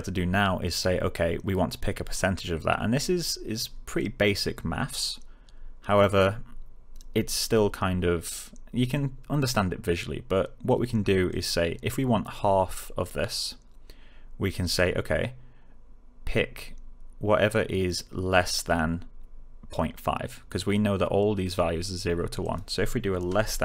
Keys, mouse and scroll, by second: 11.2 click, 14.6 click, 22.3 click, 23.3 space.